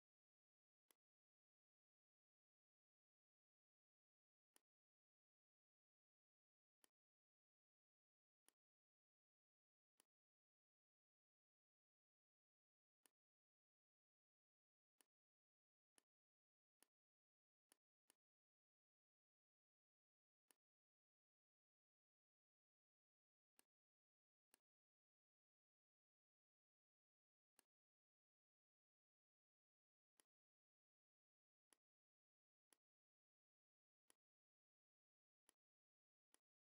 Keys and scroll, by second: 2.3 r, 6.2 v, 17.5 z, 18.0 space, 19.4 v, 29.4 v, 31.4 v.